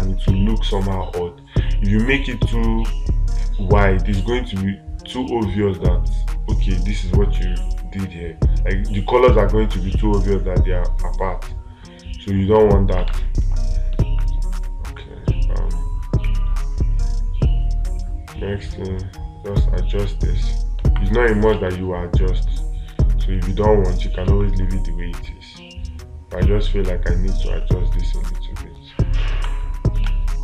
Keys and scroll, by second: 13.5 space, 22.0 space.